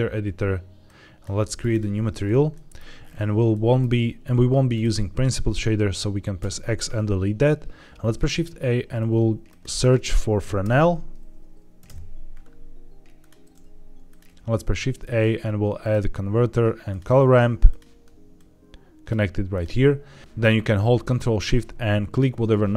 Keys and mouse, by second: 0.8 click, 2.4 middle click, 3.4 middle click, 4.6 click, 6.3 x, 7.9 shift+a, 14.2 shift+a, 18.2-19.0 drag, 19.4 click, 20.2 ctrl+z, 22.0 ctrl+shift+click.